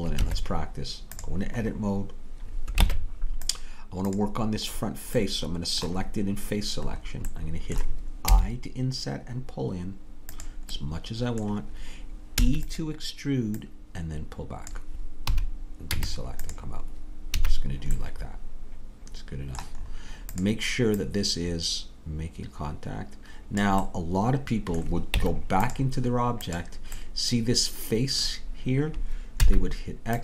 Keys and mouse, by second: 0.3 Tab, 2.9 ctrl+Tab, 8.3 i, 11.3-12.4 drag, 12.4 e, 15.9 Tab, 17.3 a, 19.8 middle click, 20.6 click, 21.0-23.6 right drag, 24.0-25.2 middle drag, 25.2 Tab, 29.4 x.